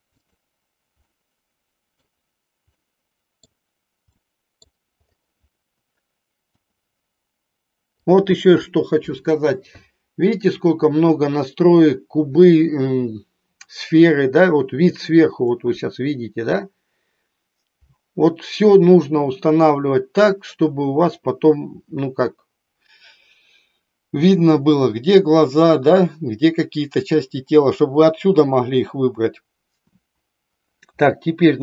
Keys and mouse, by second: 1.0-2.2 middle drag, 2.8 middle click, 4.2 middle click, 6.5 r, 8.0 click, 31.4 r.